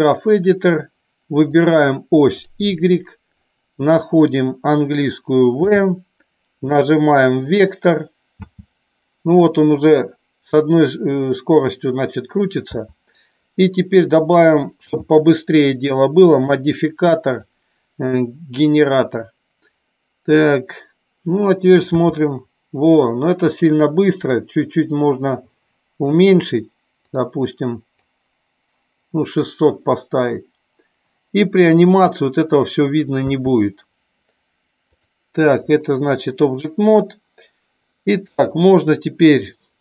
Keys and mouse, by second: 0.0 click, 1.6 click, 16.4 click, 17.4-18.3 drag, 24.3-26.2 drag, 27.1-28.1 drag, 34.9-35.8 drag.